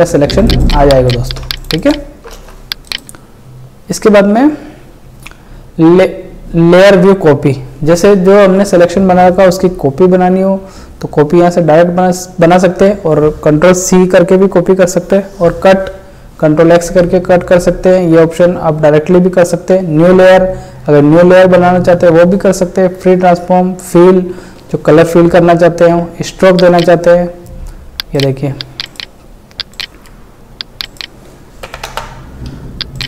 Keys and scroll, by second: 2.3 ctrl+space.